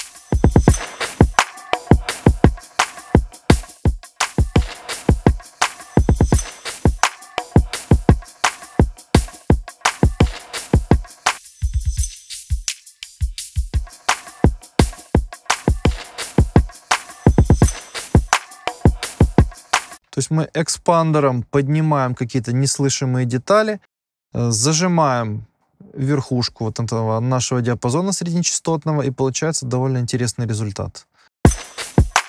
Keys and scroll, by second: 31.4 space.